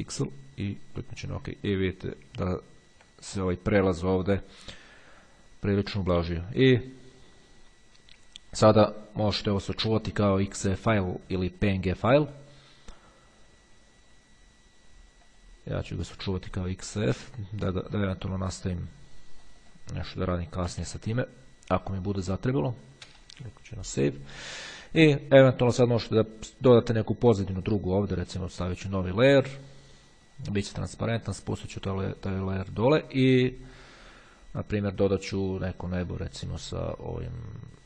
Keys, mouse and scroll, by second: 0.5-1.7 drag, 1.7-2.7 middle drag, 2.7-3.3 ctrl+scroll up 2, 6.1-7.1 ctrl+scroll down 1, 8.5-9.1 ctrl+scroll down 2, 13.5-16.1 drag, 17.1 click, 19.7 click, 20.0-21.3 typing, 22.1 Return, 28.6 click, 30.5 click, 32.2 click, 35.7-36.8 drag, 37.7-37.8 scroll down 1.